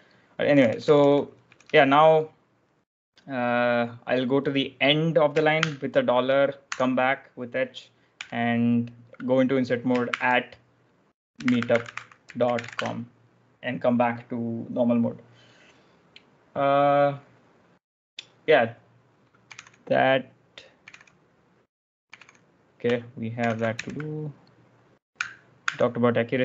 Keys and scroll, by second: 0.4-1.5 typing, 5.4 shift+4, 6.6 h, 8.0 i, 9.9-12.9 typing, 15.4-16.1 typing, 19.1-20.7 typing, 23.3 ctrl+j, 25.5 ctrl+f.